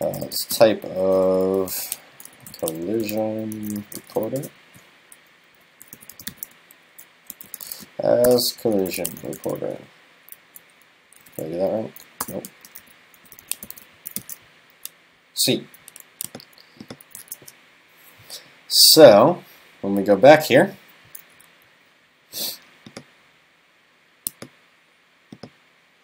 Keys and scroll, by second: 6.8 super+Right, 14.3 super+s, 18.5 super+s, 18.8 super+s, 19.7 super+s.